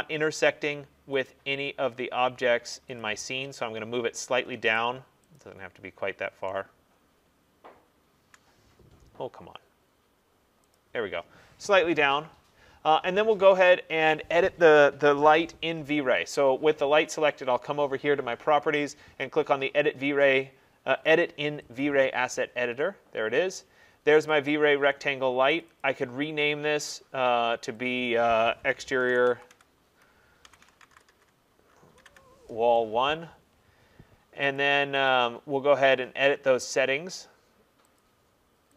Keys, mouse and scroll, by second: 0.5 middle click, 1.3 click, 3.0 click, 3.7 middle click, 3.7 middle click, 3.9 middle click, 4.1 middle click, 4.8 right click, 5.4 click, 8.8 middle click, 8.9 middle click, 9.2 middle click, 10.8 click, 21.8 click, 24.4 click, 25.7 click, 25.9 click, 28.1 click, 29.0-32.1 typing, 34.6 click, 35.1 click, 38.0 click.